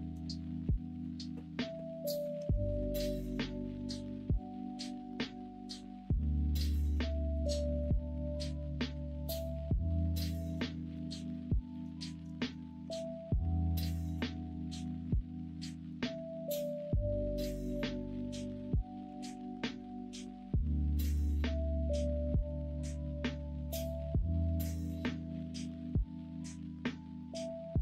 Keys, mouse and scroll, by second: 3.5-3.8 middle drag, 4.4 middle drag, 5.1-6.3 middle drag, 7.0 middle drag, 8.3-10.9 middle drag, 11.3-11.7 middle drag, 12.0 shift+middle drag, 12.4 middle drag, 12.8 Tab, 13.3 Tab, 14.1 Tab, 14.5 shift+middle click, 15.6 middle click, 16.2 middle click, 18.0-19.0 middle drag, 19.0 s.